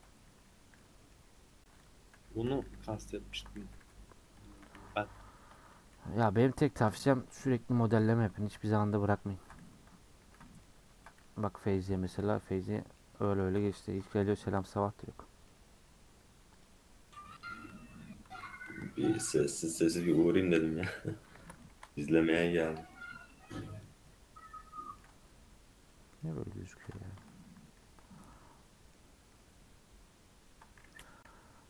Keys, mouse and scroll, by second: 0.6 scroll down 1, 0.8-1.8 middle drag, 1.8 click, 2.6 h, 3.3 ctrl+z, 3.6 g, 4.5 a, 6.2 m, 9.8-10.4 scroll down 2, 10.4 middle click, 10.8 Tab, 11.0-12.2 middle drag, 12.2 h, 12.6 click, 12.8 middle click, 12.9-13.4 scroll up 4, 13.4 middle click, 13.6 scroll down 1, 13.8 shift+middle click, 14.2 scroll up 1, 14.3 Tab, 15.0 middle click, 15.5 Tab, 17.3 click, 18.3 ctrl+a, 18.5 ctrl+a, 18.8 Tab, 19.1 middle click, 19.3 Tab, 21.7 click, 22.1-23.8 middle drag, 23.8 right click, 24.1-25.1 middle drag, 25.1 Tab, 25.4 scroll up 1, 25.9 middle click, 26.4 Tab, 26.7 Tab, 27.0 a, 28.0 Tab, 28.4-29.4 middle drag, 29.4-30.5 scroll up 2, 30.5-31.2 scroll down 2, 31.2 /.